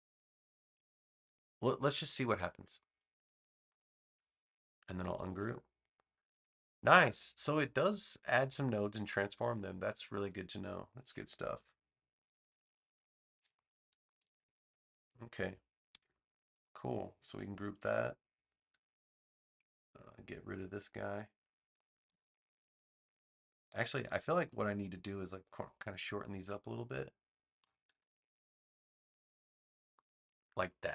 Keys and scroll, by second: 5.3 shift+super+g, 15.8 v, 17.6 super+g, 22.0 BackSpace, 26.3 BackSpace, 27.8 BackSpace.